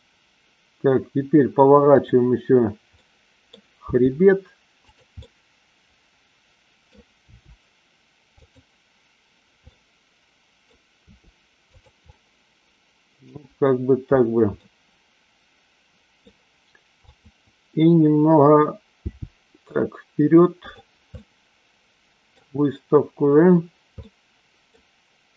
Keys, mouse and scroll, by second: 1.9-2.6 drag, 2.9-3.4 middle drag, 3.9 r, 4.8 click, 5.3-6.9 middle drag, 7.2 r, 8.3 click, 9.6-10.6 middle drag, 10.9 r, 12.0-13.1 middle drag, 14.5-16.3 middle drag, 17.0 click, 19.0 g, 20.7 click, 21.1-22.4 middle drag, 24.0 scroll up 1, 24.1-24.9 middle drag.